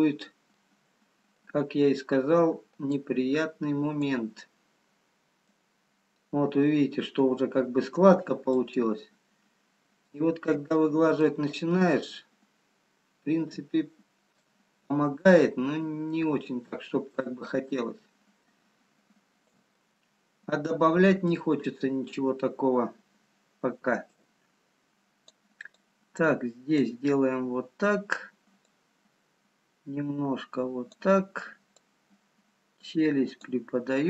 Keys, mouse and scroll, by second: 0.5 middle click, 2.3-2.6 scroll down 2, 2.9 click, 4.6 middle click, 5.7-6.7 scroll up 2, 7.4 scroll up 2, 8.7 shift+click, 11.1 middle click, 11.7 shift+click, 14.4 middle click, 15.8 middle click, 17.5 shift+click, 19.8 middle click, 23.0-23.5 scroll up 1, 24.2 click, 25.7 click, 28.9 click.